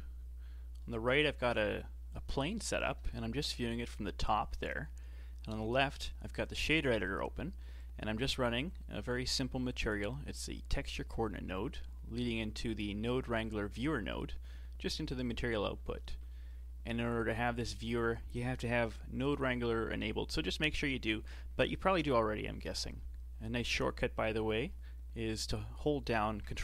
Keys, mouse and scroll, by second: 3.4 KP_7, 7.8-10.9 drag, 17.2 click.